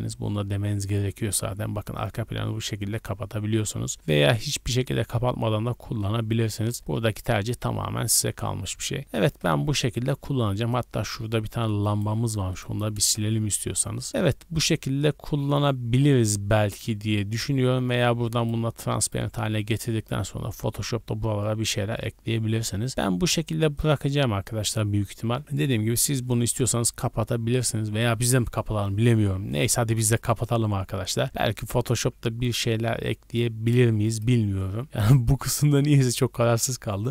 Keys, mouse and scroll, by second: 2.9 click, 3.5 click, 7.0 scroll down 2, 7.3 middle click, 7.7-9.0 scroll down 4, 9.2 KP_0, 10.5 middle click, 10.8-11.3 scroll down 4, 11.8 right click, 12.3 x, 13.2 KP_0, 18.3 click, 19.0 click, 22.9 click, 23.7 click, 29.5 click, 30.0 click, 34.0 click, 35.4 click.